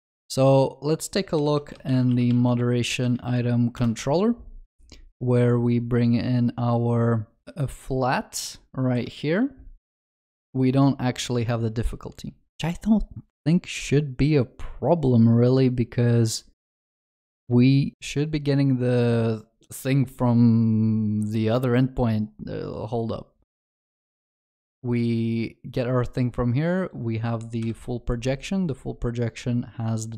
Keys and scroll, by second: 1.4 ctrl+shift+n, 9.0 ctrl+b, 27.7 ctrl+b.